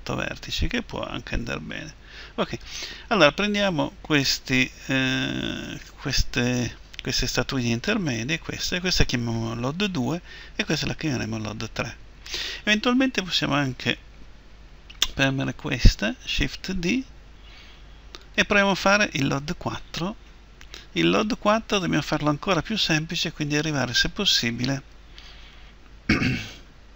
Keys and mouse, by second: 2.7 Tab, 7.6-15.1 right drag, 16.4 shift+d, 18.3-20.4 drag, 20.7 Tab, 23.5-25.5 right drag, 25.5 Delete.